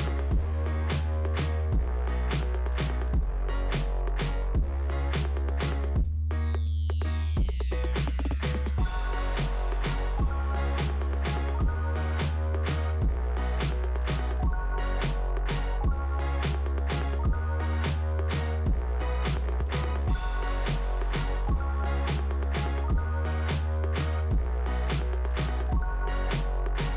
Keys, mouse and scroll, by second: 3.7 shift+p, 4.5 scroll down 1, 8.1 click, 9.0 middle click, 10.0 click, 10.1 middle click, 10.1 click, 11.1 click, 12.1 click, 13.1 click, 15.1 click, 16.1 click, 18.9 middle click, 22.3 click.